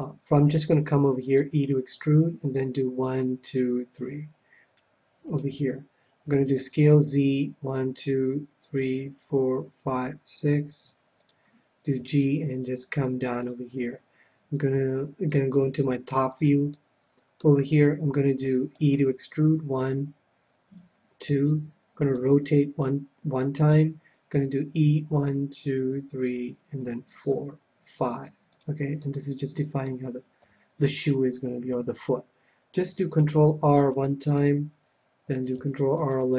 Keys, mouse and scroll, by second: 1.5 e, 5.3-7.2 drag, 6.5 s, 11.3-13.0 drag, 11.9 g, 13.3 g, 13.4-15.2 drag, 15.5 KP_7, 16.1-19.7 middle drag, 18.7 e, 21.4-23.1 drag, 22.1 r, 23.7-25.5 drag, 24.3 e, 28.6-30.1 drag, 29.0-30.5 middle drag, 30.4 KP_3, 30.9-32.9 middle drag, 33.2 ctrl+r, 34.2-36.1 right drag, 35.5 ctrl+r.